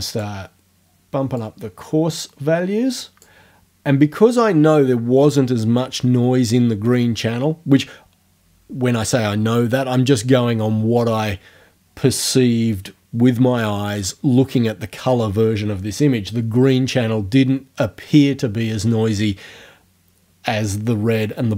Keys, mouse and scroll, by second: 1.4-3.5 drag.